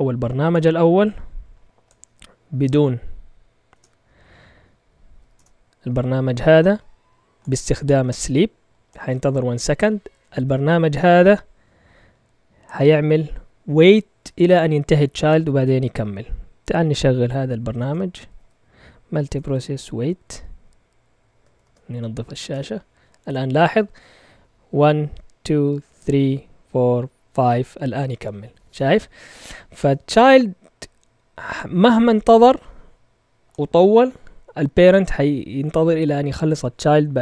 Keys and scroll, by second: 3.7 Return, 4.9-5.6 typing, 16.7-18.2 typing, 18.4 Tab, 19.3 shift+-, 19.4 Tab, 21.3-22.0 typing, 22.4 Return.